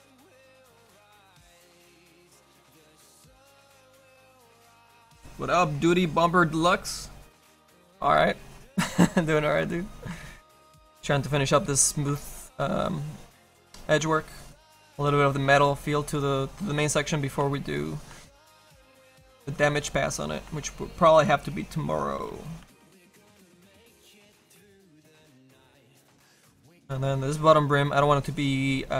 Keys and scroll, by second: 22.2 s, 22.7 s, 23.6 s.